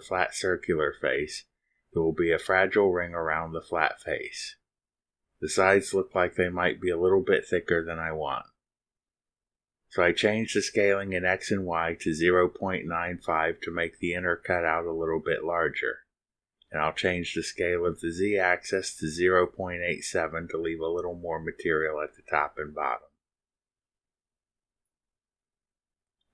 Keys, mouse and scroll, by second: 11.8 click, 14.3 0, 14.8 ., 15.8 8, 16.2 7, 17.6 click, 20.3-21.1 typing, 21.3 Tab, 22.5-23.7 typing, 24.7 click, 25.8 click.